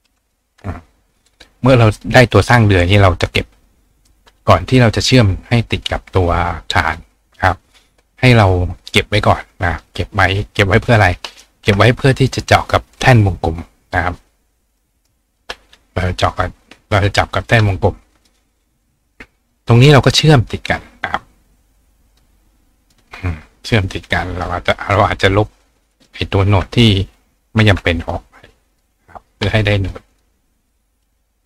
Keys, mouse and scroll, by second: 0.3 click, 2.0 click, 2.3 right click, 3.7 click, 6.9 click, 7.4 click, 8.9-9.8 drag, 10.6 ctrl+click, 11.3 ctrl+right click, 14.7 click, 15.0 right click, 16.1-17.1 drag, 18.2 click, 18.8 click, 19.2-20.2 drag, 22.1 click, 22.9 click, 23.7 click, 24.8 click, 25.6 click, 26.9 click, 30.1 click, 30.7 drag.